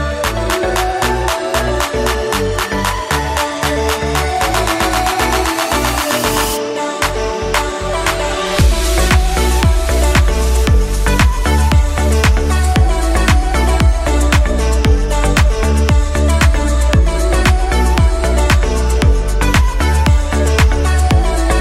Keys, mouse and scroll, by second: 1.1 a, 1.9 click, 2.2-3.5 middle drag, 3.5 click, 4.0 click, 5.7 s, 7.0 KP_1, 8.1 g, 10.7 click, 12.0 Tab, 14.0 e, 17.7 a, 18.6 ctrl+r.